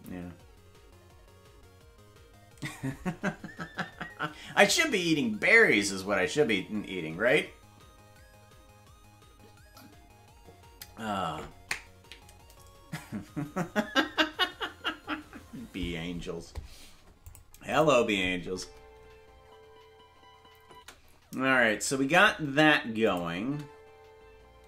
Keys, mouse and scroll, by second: 17.3 click, 17.7 click, 18.4 space, 20.7 space, 23.1 click, 23.4 space.